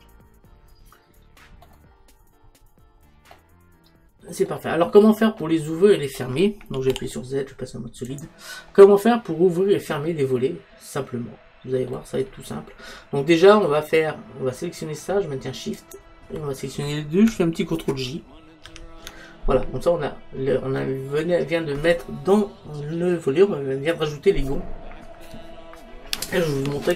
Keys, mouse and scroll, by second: 2.4 middle click, 7.0 z, 7.2-8.2 middle drag, 10.0-14.3 middle drag, 15.8-18.7 right drag, 18.7 ctrl+j.